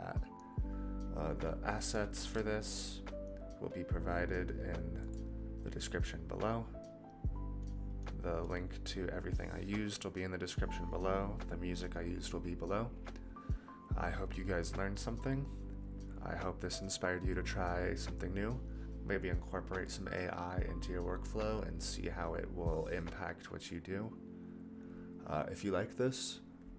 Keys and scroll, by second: 2.1 ctrl+s.